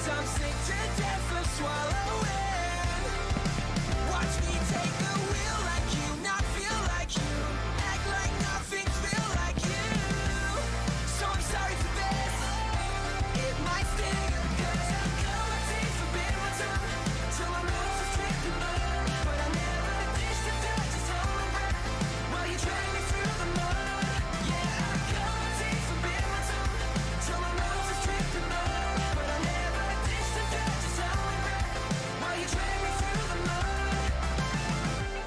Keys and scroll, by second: 2.7-4.0 typing, 8.5-10.0 typing, 10.1 Escape, 22.5 d, 23.3 a, 35.1 e.